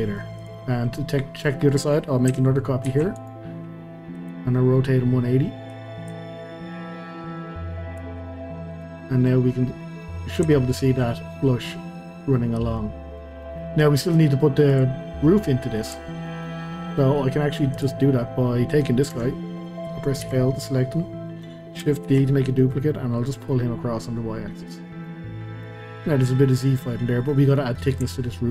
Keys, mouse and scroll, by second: 0.4 click, 0.7 scroll down 2, 1.0-2.9 middle drag, 2.9 shift+d, 4.1-5.8 drag, 8.3-8.7 middle drag, 8.7 click, 9.0-9.4 middle drag, 9.4-10.0 scroll up 2, 10.0-13.4 middle drag, 13.4 scroll down 2, 13.6-14.7 middle drag, 14.7 click, 15.3-17.7 middle drag, 17.7 click, 18.2-19.1 scroll up 1, 19.1 Tab, 20.2 l, 20.6-22.1 middle drag, 22.1 shift+d, 25.1-28.5 middle drag.